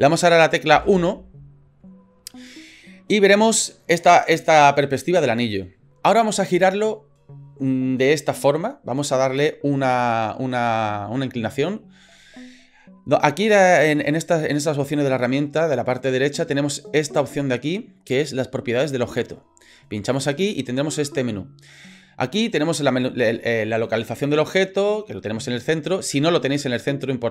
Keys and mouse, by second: 0.7 KP_1, 20.2 click, 26.4 right click.